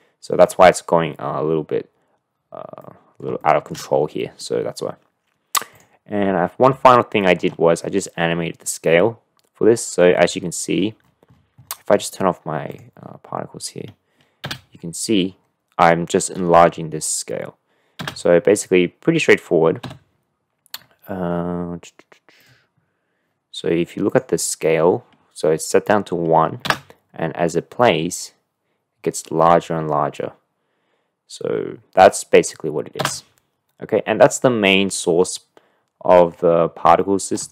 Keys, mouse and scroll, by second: 2.8-3.2 middle drag, 3.4 shift+middle drag, 4.4-4.8 middle drag, 5.7 middle click, 6.9-7.5 shift+middle drag, 12.7 click, 14.4 space, 18.7 space, 19.8 n, 24.1 drag, 26.6 space, 33.5 space, 34.6-36.3 middle drag, 37.0-37.4 middle drag.